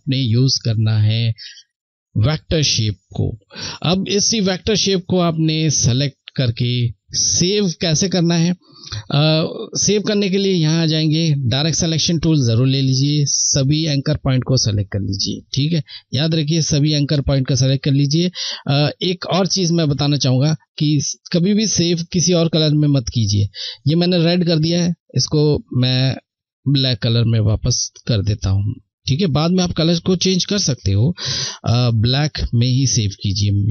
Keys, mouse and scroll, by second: 4.3 click, 9.2 click, 9.7 click, 18.9 Left, 18.9 click, 23.2 Left, 28.5 click.